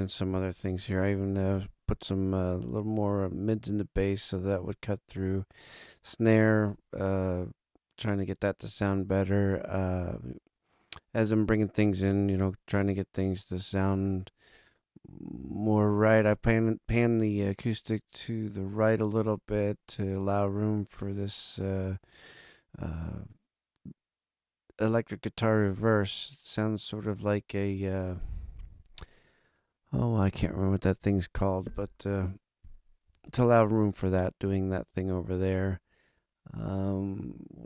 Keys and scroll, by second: 33.0 super+=.